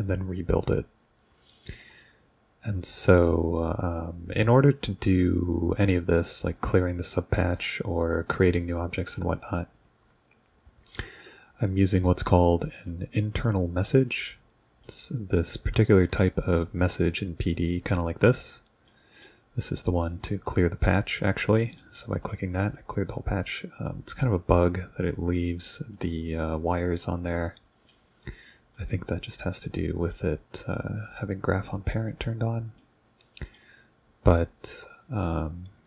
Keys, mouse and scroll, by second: 12.9-14.8 drag, 15.6-18.9 drag, 19.1 click, 21.7 ctrl+click, 23.6 right click, 26.0 click, 27.5 right click, 28.8-30.1 drag, 32.1 click, 33.5 click.